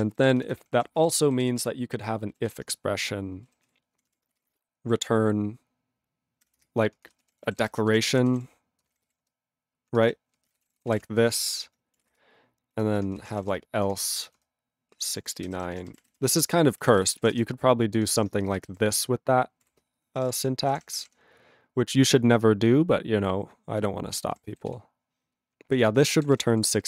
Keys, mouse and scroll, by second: 0.1 ctrl+b, 0.2 ctrl+b, 0.5 ctrl+b, 0.6 ctrl+k, 0.7 ctrl+a, 0.8 ctrl+space, 0.9 ctrl+e, 1.0 ctrl+g, 1.4 ctrl+s, 1.6 ctrl+a, 2.5 ctrl+s, 3.6 ctrl+s, 3.9 ctrl+o, 4.1 ctrl+o, 4.4 f, 4.4 space, 6.4-18.5 typing, 6.6 Return, 11.5 ctrl+o, 13.9 Return, 18.2 ctrl+p, 18.8 ctrl+n, 19.6-20.7 typing, 20.8 ctrl+p, 21.0 ctrl+p, 23.8 ctrl+w, 24.1 ctrl+k, 24.8 ctrl+s, 25.7 ctrl+e, 25.9 ctrl+space, 26.3 ctrl+alt+b, 26.3 ctrl+g, 26.5 ctrl+p, 26.7 ctrl+p, 26.7 ctrl+a, 26.8 ctrl+p.